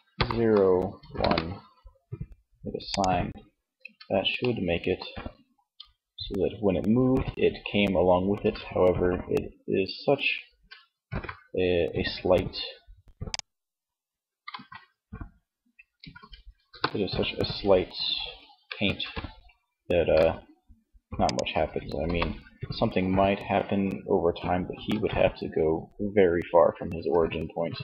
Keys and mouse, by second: 1.9 click, 2.7 Tab, 7.6 ctrl+Tab, 10.1 alt+g, 13.6 alt+g, 14.7 a, 14.9 a, 15.5 space, 17.8 alt+g, 19.0 g, 21.1 KP_3, 24.0 alt+g.